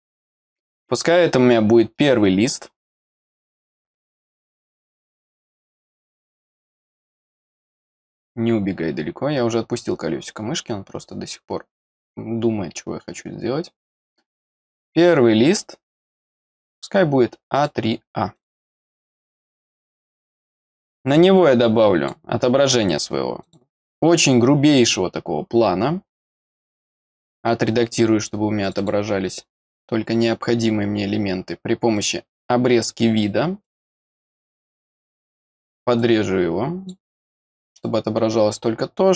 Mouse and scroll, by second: 0.7-2.6 scroll up 8, 2.7-3.9 scroll up 2, 4.1-4.4 scroll up 4, 5.4-6.6 scroll down 2, 6.6 click, 8.3-9.1 scroll down 3, 9.9-10.5 scroll down 1, 11.9 scroll down 1, 15.0-16.0 scroll down 2, 16.2-16.6 scroll down 1, 16.9 scroll down 1, 17.5 click, 18.3 click, 21.3 click, 23.4 click, 26.1 click, 26.6 click, 26.7 click, 28.6 click, 31.9 click, 33.6 click, 34.8 click, 35.9 click, 37.8-39.1 drag.